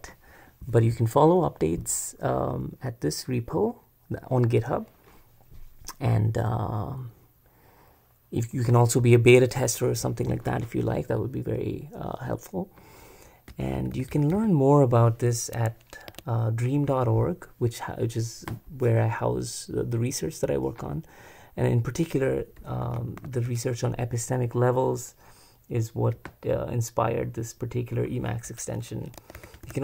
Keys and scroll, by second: 13.5-14.8 typing, 16.1 Tab, 22.5-23.6 typing, 29.2 Escape, 29.3 j, 29.6 shift+v.